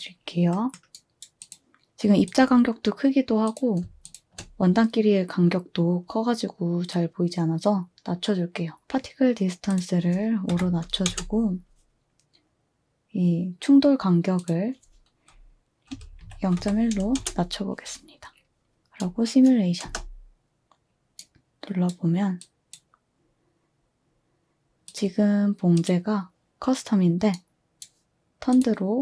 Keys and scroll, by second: 10.5-11.1 typing, 15.7-17.1 typing, 17.2 Return, 19.8 space, 22.2 typing, 23.9 space.